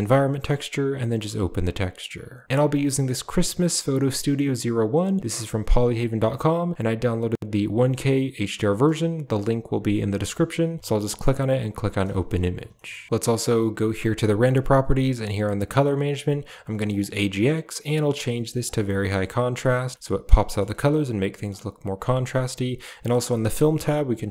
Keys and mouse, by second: 11.0 click, 12.6 shift+middle click, 16.7-18.6 drag, 19.5 middle click, 19.9 middle drag, 20.6-21.4 middle drag, 22.8-23.3 drag, 24.1 click.